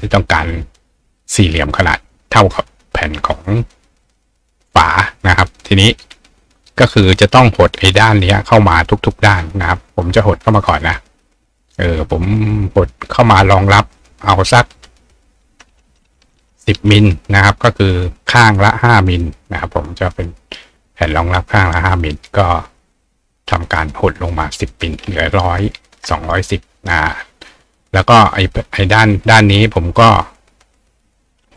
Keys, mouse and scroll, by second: 4.0 click, 5.4 click, 13.1 click.